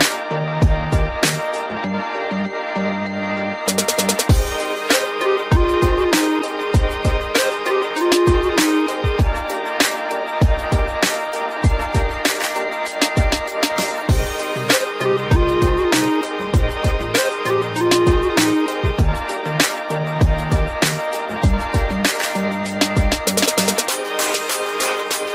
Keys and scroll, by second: 10.9 ctrl+j.